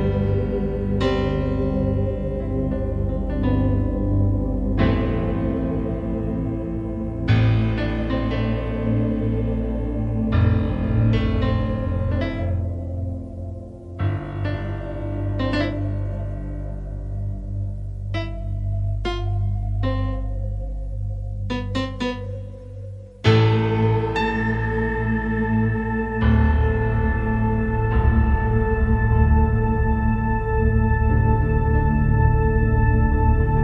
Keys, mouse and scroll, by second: 8.2 right click, 9.8 click, 10.8 click, 11.2 click, 11.6 click, 12.6 click, 17.6 right click, 18.8 click.